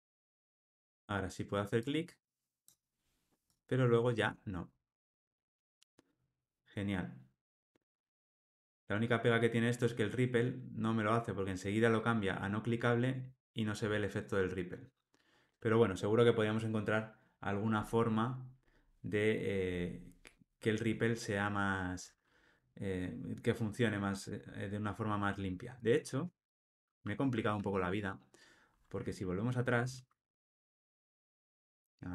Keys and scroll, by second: 26.2 super+F8, 28.9 super+F8, 31.6 super+z.